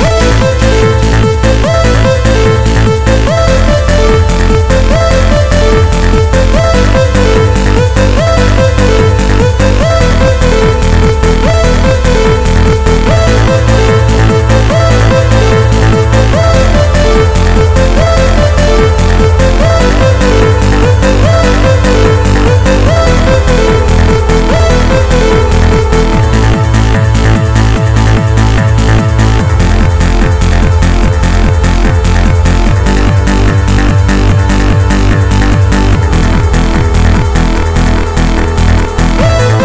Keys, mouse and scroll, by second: 0.0 right click, 1.8 shift+right click, 3.7 shift+right click, 5.3 middle click, 9.3 shift+right click, 10.3 shift+right click, 11.6 middle click, 14.1 middle click, 17.1 shift+right click, 18.1 shift+right click, 19.1 middle click, 21.1 KP_1, 24.3 middle click, 28.1 e, 35.2 click, 37.2 click, 39.0 middle click.